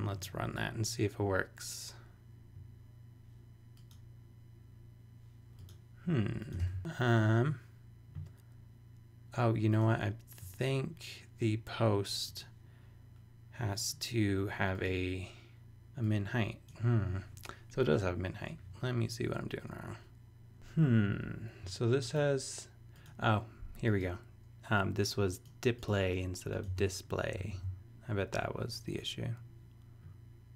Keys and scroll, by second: 26.7 s, 27.3 super+s.